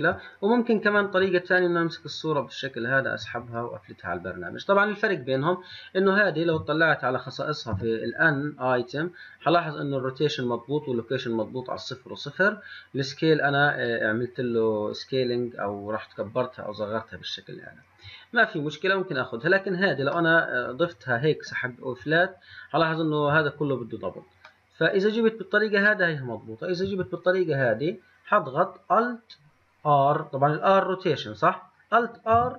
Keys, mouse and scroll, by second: 0.0 click, 3.0 click, 6.1 click, 6.6 v, 7.8 n, 19.6 click, 20.3-23.7 middle drag, 24.6 middle drag, 25.1-25.8 middle drag, 25.8 click, 27.0 Delete, 27.3 click, 32.4 alt+r.